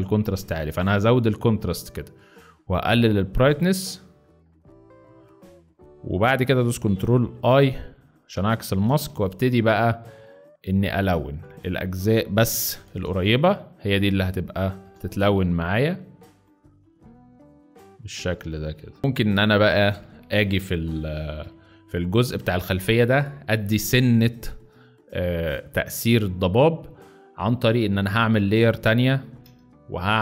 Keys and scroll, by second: 7.4 ctrl+i, 8.8 b, 12.4 ], 13.1 ], 14.8 x, 19.0 z, 19.8 space, 21.3 space, 28.5 z.